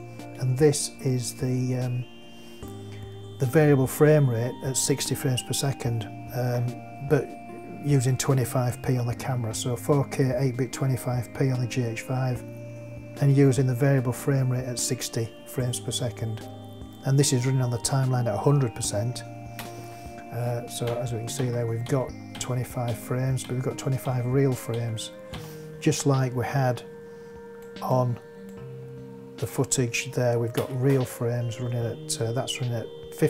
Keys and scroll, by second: 19.6 space, 20.8 Right, 30.5 space.